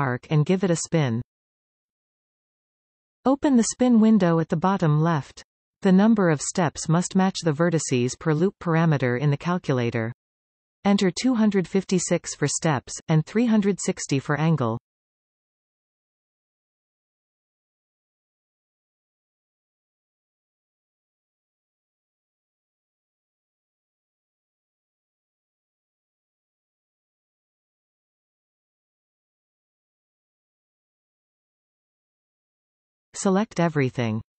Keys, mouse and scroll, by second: 0.7 click, 3.3-27.3 drag, 16.7 Return, 22.8 Return, 27.2 Escape, 27.8-34.0 middle drag, 28.6 scroll down 2, 31.2-31.7 scroll up 2, 34.0 alt+shift+click.